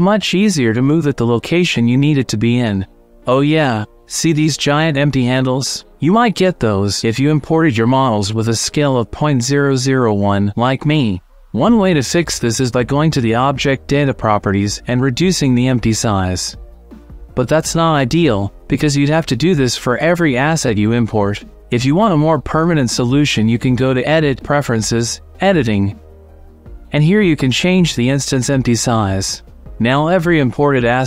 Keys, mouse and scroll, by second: 0.8 n, 1.3 middle click, 5.6-7.4 shift+middle drag, 11.5 click, 14.5-16.3 drag, 18.3-19.0 middle drag, 19.5-20.7 middle drag, 20.6 click, 20.8 click, 20.8 middle click, 21.7 middle click, 24.4 click, 30.7 shift+middle click.